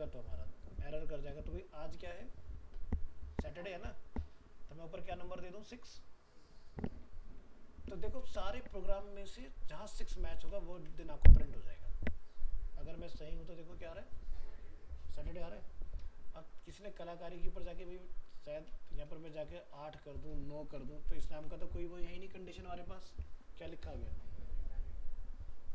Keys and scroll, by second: 10.7 ctrl+s, 16.7 alt+Tab, 21.3 ctrl+s, 23.1 alt+Tab.